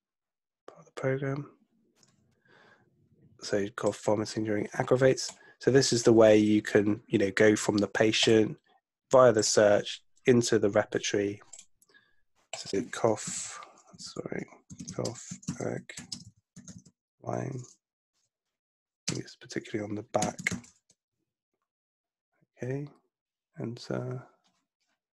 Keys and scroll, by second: 13.2-17.3 typing, 19.1-21.0 typing.